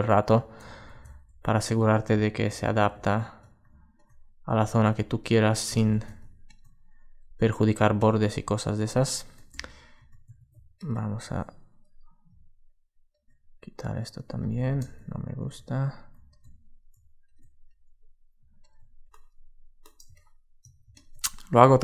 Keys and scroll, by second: 0.4 alt+super+z, 1.8 super+space, 5.6 alt+super+z, 14.4 alt+super+z.